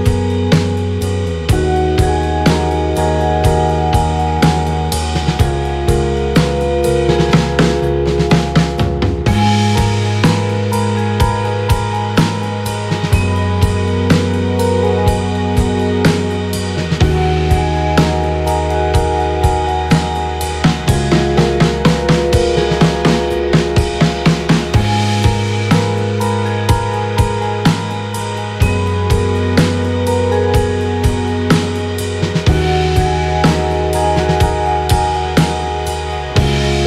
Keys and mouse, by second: 1.5 ctrl+click, 7.7 click, 8.9 shift+click, 11.1 click, 12.2 shift+click, 14.2-15.4 right drag, 17.0 click, 19.4-24.4 right drag, 25.5-27.0 drag, 30.8 click, 32.0 click, 32.1 click, 32.5 KP_1, 34.4 shift+middle click.